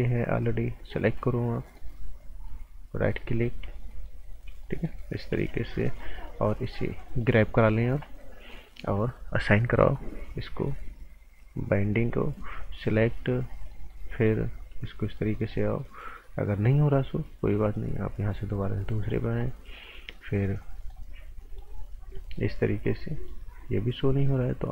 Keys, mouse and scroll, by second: 1.1-1.8 scroll down 1, 1.8 right click, 2.9-3.3 scroll up 1, 3.3 right click, 3.9 alt+right click, 4.3 scroll up 1, 4.6 right click, 5.3 g, 5.8 right click, 6.1-6.7 scroll down 1, 6.7 click, 10.5 click, 13.4 scroll down 1, 13.7 right click, 14.1 scroll up 1, 14.7 click, 17.6 click.